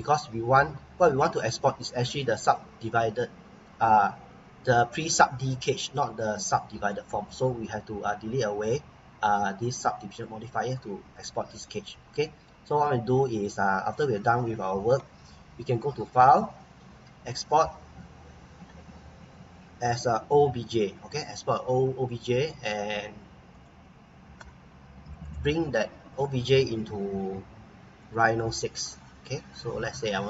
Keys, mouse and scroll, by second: 1.3-2.0 scroll up 1, 2.0-2.5 scroll down 1, 2.5 middle click, 5.7 scroll up 1, 6.3-6.7 scroll down 1, 6.8 middle click, 7.3 scroll down 1, 10.1 click, 10.7-11.0 scroll down 1, 11.1 middle click, 11.8 middle click, 12.8-13.1 scroll up 1, 13.2 middle click, 16.0 click, 20.6 click, 23.5 click, 28.0 click, 28.7 scroll down 1, 29.2 middle click, 30.1 click.